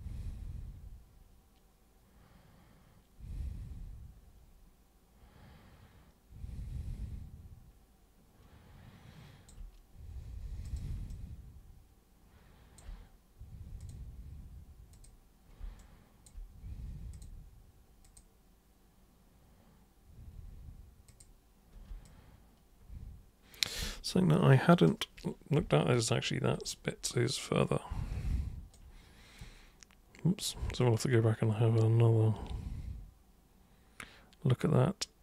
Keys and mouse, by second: 10.6 super+click, 11.0-12.8 alt+super+drag, 13.8 super+click, 14.9 super+click, 15.8 alt+super+click, 17.1 super+click, 18.0 super+click, 21.1-23.9 super+drag, 26.7-28.7 alt+super+drag, 30.4 super+click, 30.8-35.2 alt+super+drag.